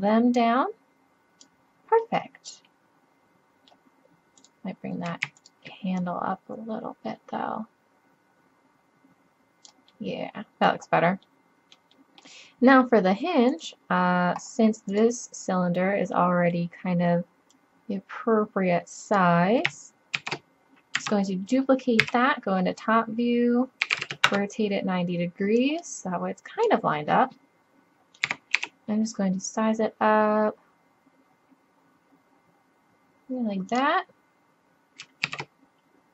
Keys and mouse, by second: 1.1-2.1 middle drag, 2.2 middle click, 2.4 middle click, 10.1-11.5 middle drag, 13.5-14.5 middle drag, 16.1 middle drag, 16.6 middle click, 20.2 shift+d, 22.1 KP_7, 23.9 r, 25.6-27.5 drag, 28.3 s, 31.5 s, 35.3 shift+d.